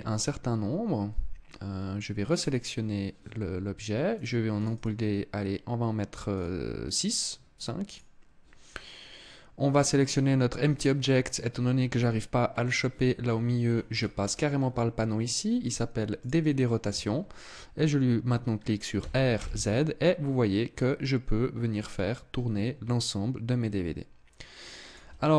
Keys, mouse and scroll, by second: 1.8 right click, 3.7 click, 4.1 click, 4.3 click, 7.4 click, 12.8-13.4 scroll down 9, 13.4-14.0 scroll up 6, 14.0 scroll down 1, 14.2-14.9 scroll down 2, 14.7-15.3 scroll up 2, 15.8 click, 18.5 r, 24.5 click, 25.0 KP_0.